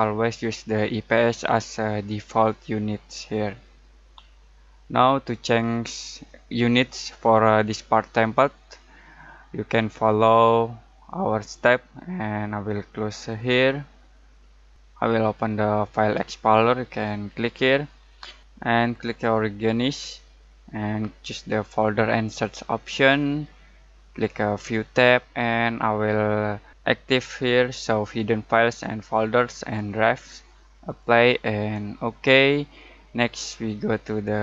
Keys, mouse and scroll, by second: 13.3 click, 17.2 click, 22.1 click, 26.8 click, 30.8-34.4 drag.